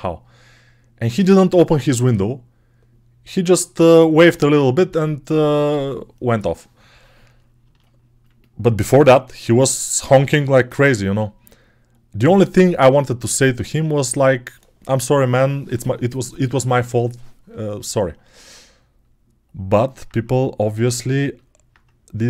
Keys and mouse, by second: 9.1-22.2 alt+drag, 12.1 alt+q.